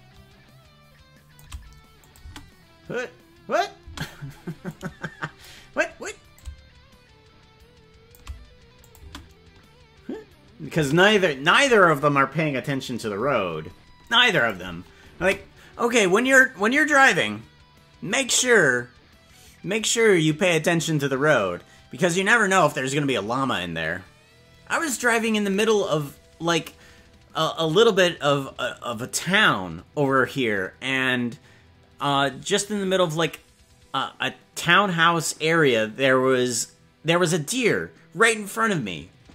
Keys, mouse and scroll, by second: 2.0 click, 2.3 space, 3.9 space, 4.7 click, 6.3-8.2 shift+drag, 8.8 click, 9.1 space, 10.9 space, 14.4 click, 14.7 space, 15.3 space.